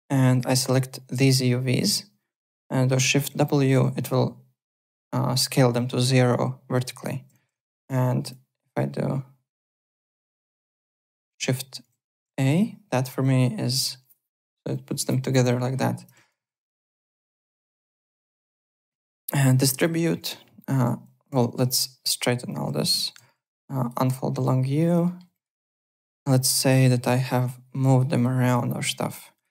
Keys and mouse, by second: 0.2 4, 0.7 click, 3.2 shift+w, 7.3 ctrl+z, 8.2 click, 10.7 shift+click, 11.8 shift+a, 13.1 w, 16.8 alt+middle click, 17.4 w, 17.8 3, 19.3 4, 19.8 click, 20.6 click, 21.4 shift+w, 22.5 click, 22.9 shift+click, 23.0 shift+w, 23.4 click, 24.3 click, 25.0 alt+middle click, 25.3 click, 26.3 click, 26.8 click, 29.0 click.